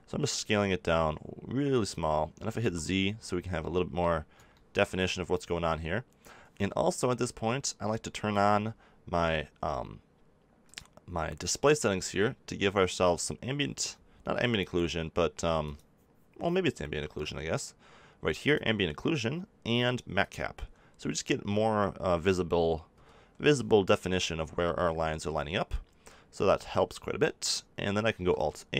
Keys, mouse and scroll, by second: 1.8-3.7 drag, 2.5 z, 8.3 n, 17.4-18.4 middle drag, 22.9-25.7 middle drag, 22.9 n, 28.1 ctrl+a.